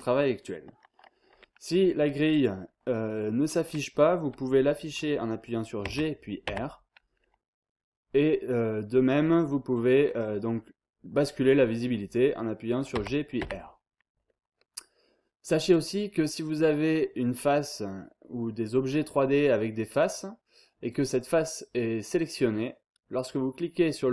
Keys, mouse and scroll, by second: 5.8 g, 6.4 r, 12.9 g, 13.4 r.